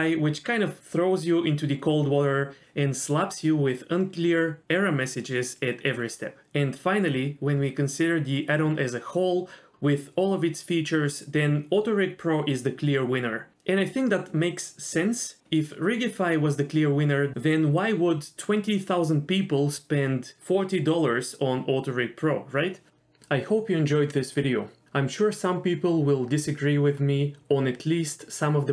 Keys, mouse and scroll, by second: 0.0 click, 0.3 middle click, 0.6 g, 1.8 middle click, 2.5 scroll down 1, 2.8 shift+middle click, 3.0-3.3 scroll up 1, 3.4-4.0 scroll down 1, 7.4 shift+middle click, 7.4 scroll down 2, 7.4-8.0 scroll up 1, 8.3 click, 9.3 click, 9.6 r, 15.0-15.4 scroll up 1, 15.5 middle click, 16.4 r, 19.5 r, 26.6 r.